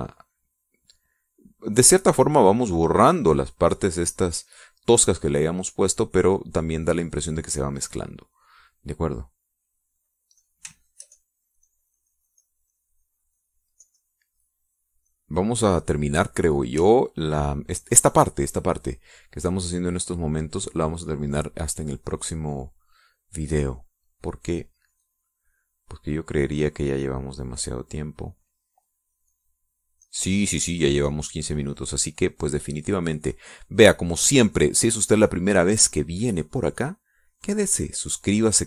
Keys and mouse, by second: 0.9-2.2 drag, 2.3-4.3 drag, 4.7 middle click, 5.7 middle click, 8.5 click, 8.6 middle click, 11.7 click, 14.1-16.3 shift+drag, 16.4 shift+middle click, 18.1-19.3 shift+drag, 22.6 click, 25.9-29.9 drag, 30.6 click, 31.3 click, 32.3-34.7 drag, 37.7-38.6 drag.